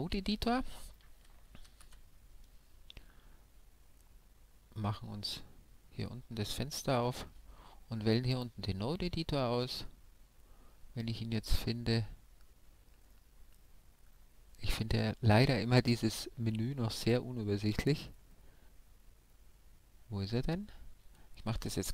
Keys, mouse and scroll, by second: 1.9 alt+z, 5.4-7.4 drag, 8.3-10.0 drag.